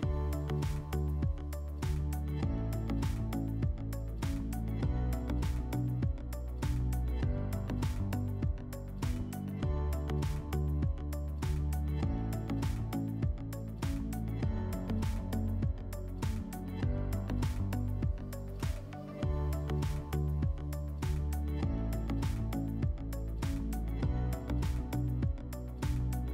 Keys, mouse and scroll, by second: 0.0 F4, 2.8 click, 5.2 r, 6.6-8.2 drag, 13.2-14.9 drag, 16.1-17.8 drag, 22.3 Escape, 24.3 q.